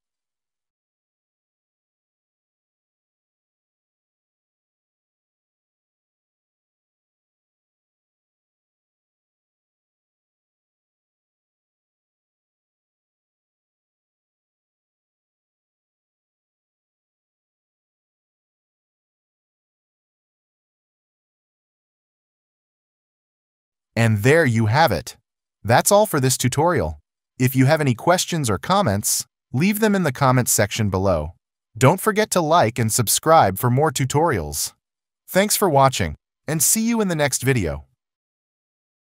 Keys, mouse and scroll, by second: 1.2 ctrl+click, 2.2 alt+click, 2.3 alt+click, 2.5 ctrl+s, 2.6 alt+click, 3.5 alt+click, 4.0 alt+scroll, 6.8 scroll, 7.2 alt+click, 7.6 ctrl+z, 8.1 alt+click, 8.8 ctrl+z, 8.9 ctrl+z, 9.2 ctrl+z, 9.4 ctrl+z, 10.6 alt+click, 11.3 ctrl+z, 11.9 alt+click, 12.4 ctrl+0, 13.0 alt+click, 13.2 alt+click, 13.6 ctrl+z, 14.7 ctrl+z, 14.8 alt+click, 18.0 s.